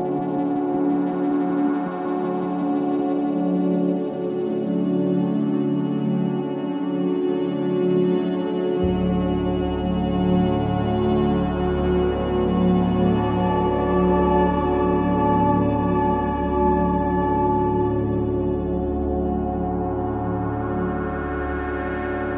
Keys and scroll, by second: 3.3 space, 10.1 ctrl+r, 10.6 F4, 12.5 F2, 15.5 Escape.